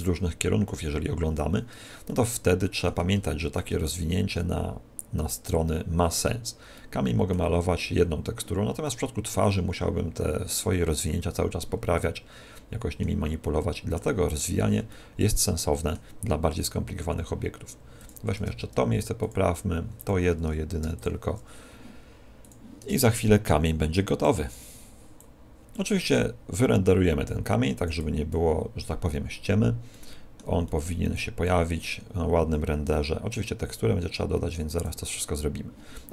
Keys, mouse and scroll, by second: 0.6 middle click, 2.0 middle click, 3.2 shift+middle click, 6.7 middle click, 8.8 middle click, 12.0 middle click, 13.4 middle click, 14.8 middle click, 18.0 click, 18.4 Tab, 19.3 click, 20.8 u, 22.4 click, 22.8 Tab, 23.6 click, 25.1 click, 25.8 click, 29.9 middle click, 30.6 middle click, 31.2 click, 32.5 click.